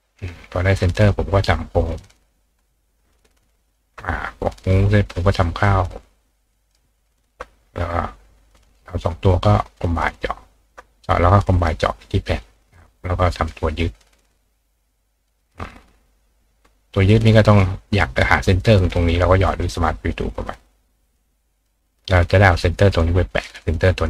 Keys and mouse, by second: 0.3 click, 1.1 click, 1.9-7.4 right drag, 2.7-3.7 shift+drag, 4.6 click, 5.6-6.7 shift+drag, 8.6 shift+click, 9.8 click, 10.5 shift+click, 11.7 click, 12.4 click, 13.4 click, 14.1-15.3 drag, 16.1 click, 17.2 click, 19.5 click, 20.1 click, 21.0 click, 21.6 click, 22.6-23.7 drag.